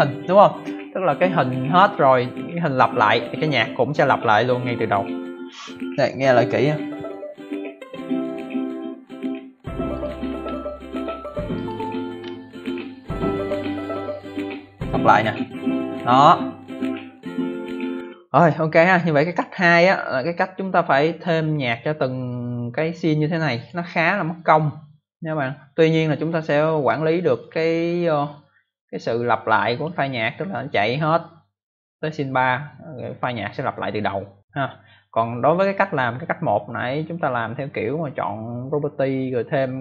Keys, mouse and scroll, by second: 9.9 click, 10.2-11.2 scroll up 2, 11.5 click, 19.2 click, 19.2 scroll down 1, 20.5 click, 23.5 click, 27.3 click, 28.5 click, 38.5 right click.